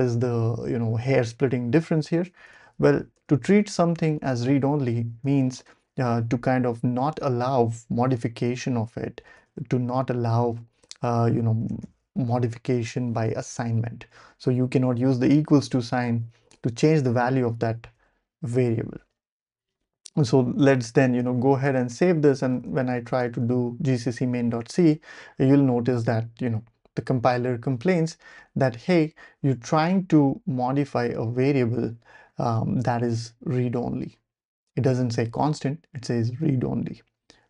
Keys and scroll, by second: 1.7 Tab, 2.4 i, 2.9 Tab, 3.1 Return, 5.0-6.1 typing, 9.0-12.4 typing, 17.9 Escape, 19.0-19.9 typing, 21.0-23.9 typing, 23.9 Return.